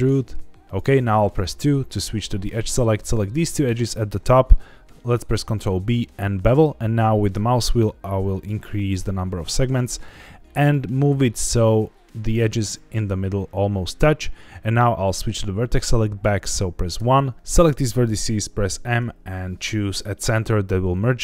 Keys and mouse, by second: 0.6 click, 1.5 2, 3.0 click, 3.7 shift+click, 5.3 ctrl+b, 11.3 click, 12.7 shift+middle click, 16.9 1, 17.3 ctrl+z, 17.3 click, 18.6 m, 20.7 click.